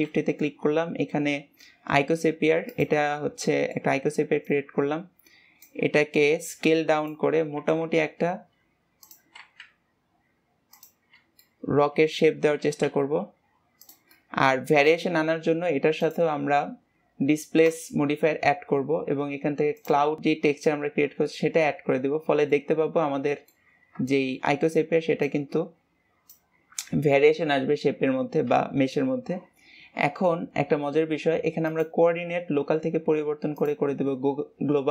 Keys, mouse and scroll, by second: 3.1-4.4 middle drag, 4.4 click, 5.8-6.4 scroll down 2, 6.4 click, 11.0 scroll up 2, 11.4-12.5 middle drag, 12.5 s, 14.0-15.9 middle drag, 15.9-16.9 drag, 19.7-20.9 drag, 21.3-23.7 middle drag, 23.7 scroll up 1, 24.0-30.1 shift+middle drag, 31.6-34.7 drag.